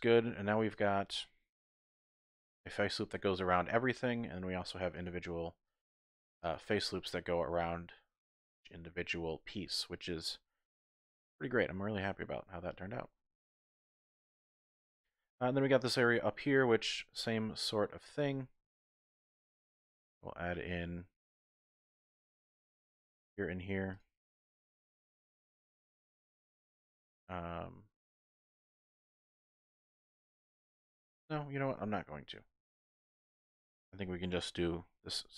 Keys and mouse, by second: 0.7 alt+shift+click, 1.6 3, 2.7-4.1 middle drag, 4.9 alt+shift+click, 5.8 alt+shift+click, 7.2-8.2 drag, 8.5 shift+click, 9.0 typing, 9.4-12.6 drag, 12.9 shift+click, 14.0 middle click, 14.5 shift+middle click, 16.8 shift+middle click, 17.9 middle click, 18.4 shift+middle click, 19.6 ctrl+r, 21.4 click, 22.4 ctrl+r, 23.9 click, 25.1 click, 26.1-28.4 middle drag, 28.4 click, 28.7-29.1 typing, 29.1-31.0 middle drag, 31.4 ctrl+z, 32.5 ctrl+z, 33.6 middle click, 34.6 k.